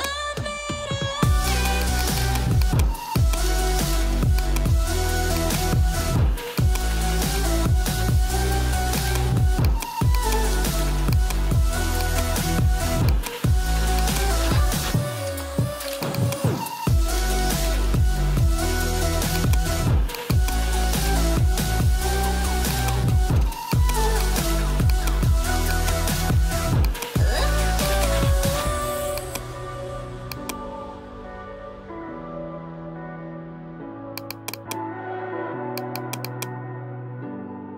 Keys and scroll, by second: 0.1 [, 2.3 ], 17.8 9, 18.1 5, 21.0 9, 21.3 5.